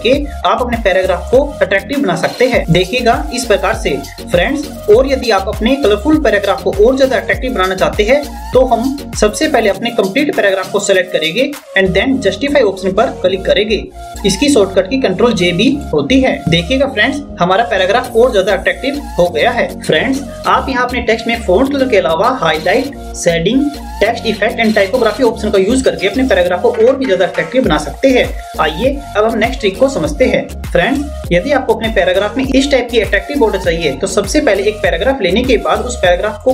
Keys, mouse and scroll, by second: 0.8 click, 10.4 click.